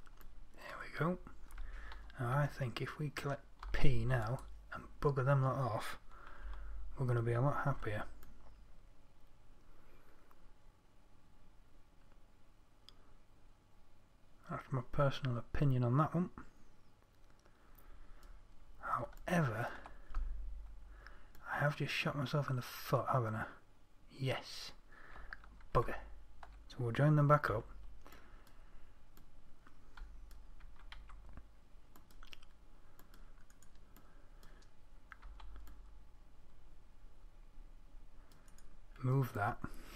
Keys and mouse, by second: 0.2-4.0 drag, 4.0 p, 6.9 Tab, 8.1 z, 19.8-22.4 middle drag, 22.8-23.3 middle drag, 26.2 ctrl+z, 27.9 Tab, 31.1 z, 31.4 c, 35.7 c.